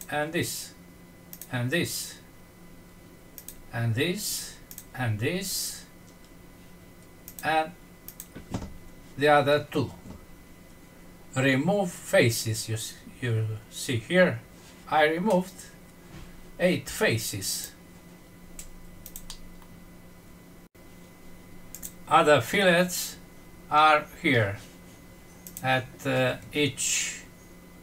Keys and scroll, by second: 19.5 F6.